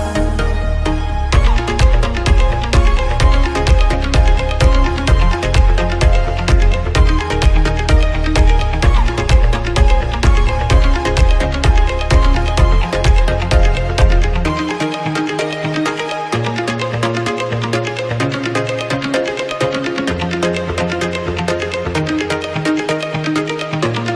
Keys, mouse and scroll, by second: 0.8 ctrl+s, 1.5 Right, 2.4 Left, 3.1 Right, 3.8 Left, 4.8 scroll down 1, 5.1-5.5 shift+middle drag, 5.5-5.9 scroll up 2, 5.9 ctrl+s, 7.3 a, 9.3 x, 10.9 ctrl+s, 11.1 scroll down 2, 11.2-11.6 middle drag, 11.6 alt+a, 11.9 ctrl+s, 12.5 KP_1, 13.1 z, 14.2 middle click, 15.0 z, 15.9 ctrl+s, 16.2-17.5 middle drag, 17.5 click, 18.0-21.0 drag, 22.3-23.7 drag.